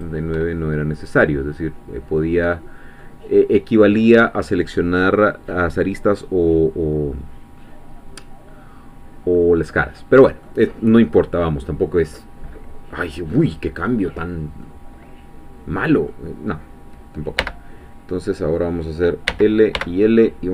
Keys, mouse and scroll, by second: 0.6 shift+scroll down 2, 1.0-8.7 middle drag, 8.7-9.4 scroll down 1, 9.4-10.6 middle drag, 10.9-13.4 middle drag, 13.4-14.6 scroll down 1, 14.6-17.4 middle drag, 17.4 l.